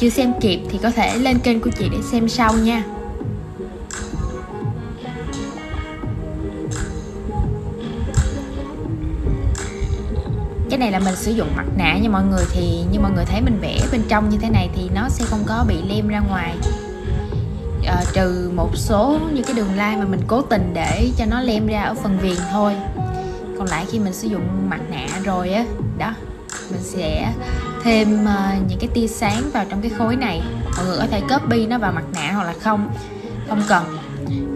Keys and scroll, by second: 1.3 super+x, 2.6 shift+super+v, 4.3 super+z, 7.4 shift+super+v, 11.4 super+c, 12.0 shift+super+v, 16.9 super+g, 27.5 super+x, 29.1 shift+super+v.